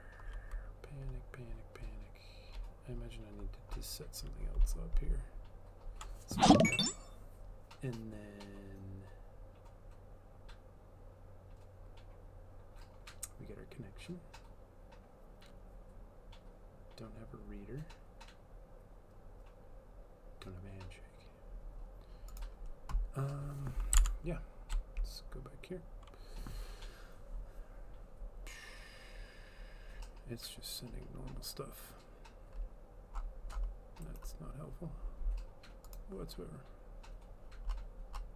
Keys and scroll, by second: 24.0 alt+Tab.